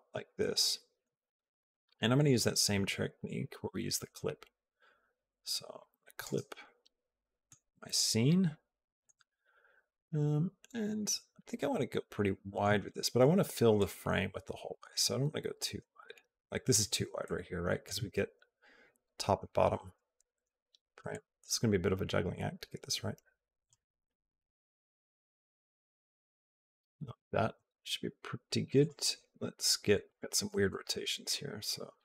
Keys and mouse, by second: 0.2 shift+middle click, 2.0 click, 3.2-6.0 drag, 6.4 shift+middle click, 7.6-8.8 shift+middle drag, 11.7 shift+middle click, 13.6-16.6 drag, 17.0 shift+middle click, 21.0-23.5 drag, 24.3-26.8 shift+middle drag, 28.5 click, 29.8-31.4 drag, 31.8-32.0 drag.